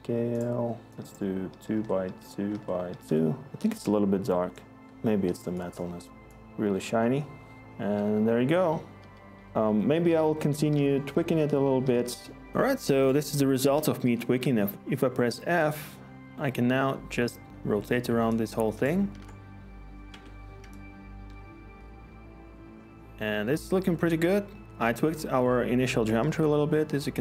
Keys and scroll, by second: 0.9 ctrl+a, 0.9 Tab, 1.4-3.5 typing, 1.7 Tab, 2.5 Tab, 3.1 Tab, 4.6-5.3 typing, 7.6-11.8 typing, 14.0-14.7 typing, 14.7 ctrl+z, 19.1 ctrl+z, 20.0 Escape.